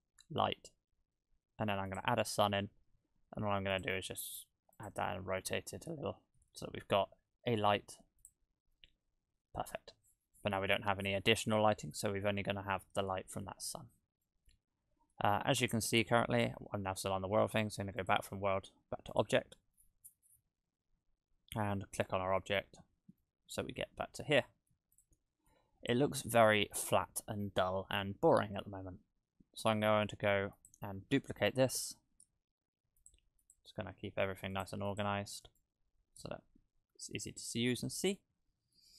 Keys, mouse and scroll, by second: 2.3 middle click, 3.4 g, 3.9 r, 6.4 KP_0, 7.1-8.3 scroll up 4, 8.3 click, 9.2-9.7 scroll up 1, 9.7 scroll down 1, 10.1-10.4 scroll up 1, 10.4-11.4 scroll down 4, 11.4 scroll down 1, 12.3-12.7 scroll up 3, 12.7-14.2 scroll down 1, 14.2 middle click, 15.5-16.8 scroll down 2, 16.8-17.3 scroll down 3, 18.0 click, 19.8-22.0 scroll down 20, 22.0 right click, 22.5-23.0 scroll up 14, 23.2 middle click, 24.0-25.0 scroll up 3, 24.4 middle click, 25.0 click, 25.5 click, 26.4-26.9 scroll up 4, 26.9-27.9 scroll down 1, 27.9-28.3 scroll down 5, 30.6 click, 31.5 shift+d, 33.4 click, 33.9 g, 34.9 click, 35.4 right click, 36.0 g, 37.6-38.2 scroll up 4, 38.2 middle click.